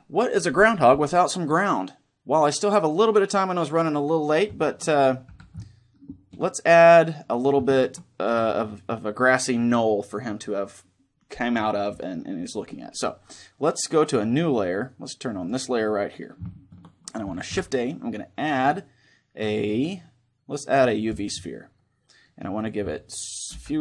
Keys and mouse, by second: 4.3-9.2 middle drag, 5.0 a, 15.1-17.0 drag, 16.2-18.7 middle drag, 17.2 shift+a, 22.3-23.8 drag.